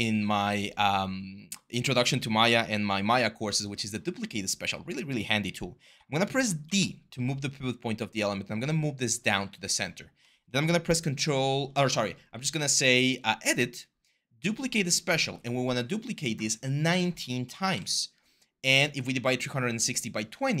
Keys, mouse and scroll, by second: 6.4 d, 7.7-9.0 x, 12.2 e, 17.1-17.9 typing.